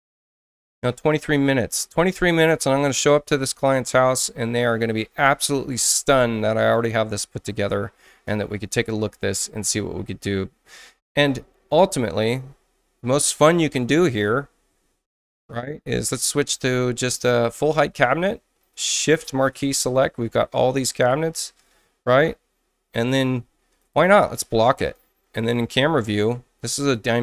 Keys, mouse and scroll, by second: 1.1-12.3 drag, 15.3 space, 18.7 shift+click, 23.8 click, 24.8 click, 26.9 click.